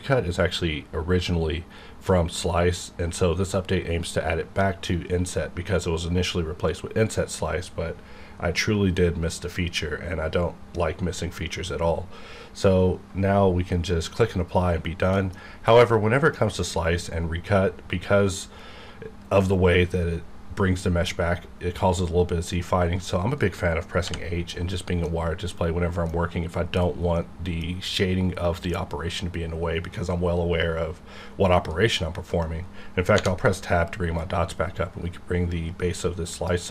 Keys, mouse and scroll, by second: 15.1 middle click, 15.2 scroll down 1, 15.4-15.9 scroll up 1, 15.9-19.2 middle drag, 23.0 middle click, 23.3-24.0 scroll down 1, 24.2 h, 24.6-25.3 scroll down 2, 25.0 middle click, 27.1-31.9 middle drag, 31.9 middle click, 33.1 Tab, 34.2-36.7 drag.